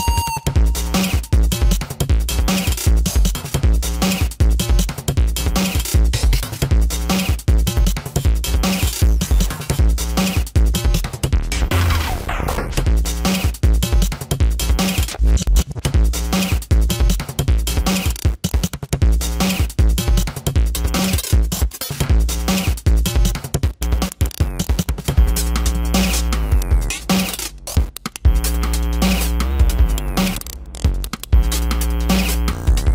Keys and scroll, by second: 2.0 space, 3.2 ctrl+alt+z, 4.0 space, 4.7 space, 6.9 ctrl+alt+z, 9.5 ctrl+alt+z, 10.0 space, 12.5-16.6 typing, 12.7 ctrl+-, 14.1 ctrl+alt+z, 17.3 ctrl+alt+z, 18.6 space, 20.3 space, 22.9 space, 23.7 space, 24.8 ctrl+alt+z, 25.4 space, 26.7 space, 27.3 ctrl+alt+z, 28.1 space, 28.9 space, 29.4 space, 30.0 space, 32.6 space.